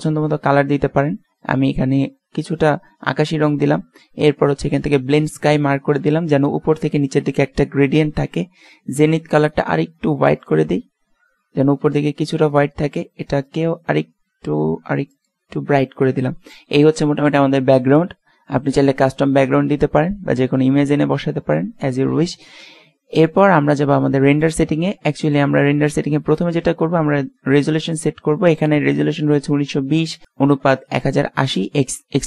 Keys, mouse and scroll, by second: 4.9-6.7 drag, 9.6-11.2 drag, 12.6-15.4 drag, 24.5-27.4 drag.